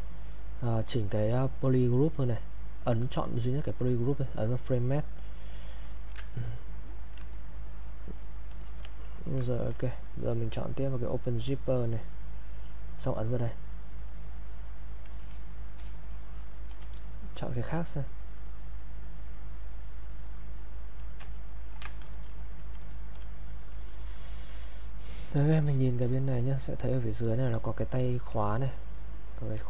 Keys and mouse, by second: 4.6 click, 5.9 alt+click, 6.3 ctrl+right click, 7.3 click, 9.1 ctrl+right click, 11.3 click, 13.5 click, 15.2-19.4 alt+drag, 19.5 click, 21.4 ctrl+right click, 22.0 ctrl+alt+click, 22.3 click.